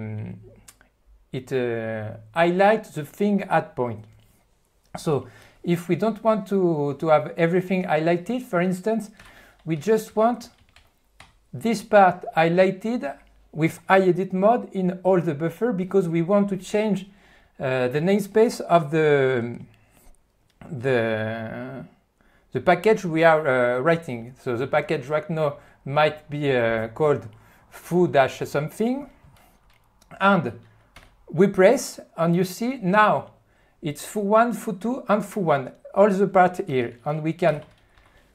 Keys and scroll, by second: 9.2-12.0 typing, 37.4-38.3 typing.